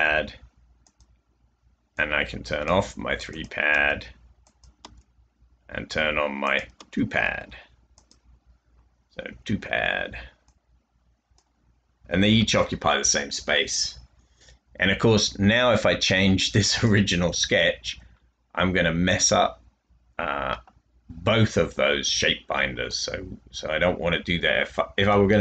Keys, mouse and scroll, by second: 0.0-0.4 typing, 3.6 click, 4.7 click, 6.7 click, 9.3-10.0 typing, 11.8-13.0 typing, 15.8-16.6 typing.